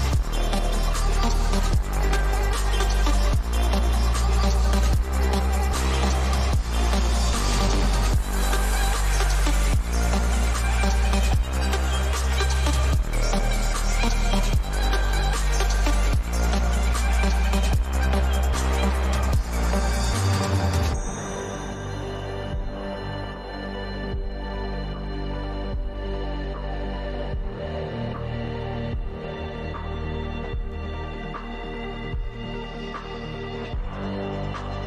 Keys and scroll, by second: 8.2 ctrl+-, 8.3 ctrl+-, 28.4 ctrl+=, 29.5 ctrl+=.